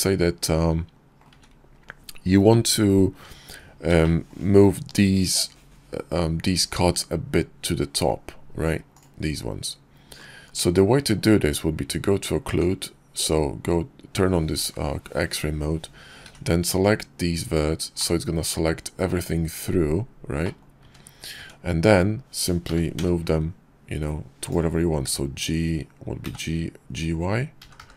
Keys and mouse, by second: 0.1 middle click, 0.2 click, 0.4 `, 2.2 `, 8.0 click, 10.6 Tab, 15.3 b, 17.1-18.2 middle drag, 19.5 middle click, 19.9 `, 20.4 `, 21.7 g, 23.5-24.3 drag, 25.3 y, 26.7 g.